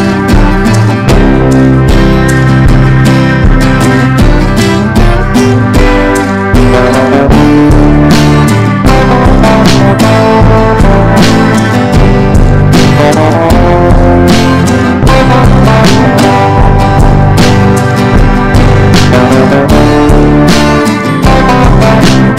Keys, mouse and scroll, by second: 11.3-19.7 shift+drag, 19.9 shift+click, 20.5 click.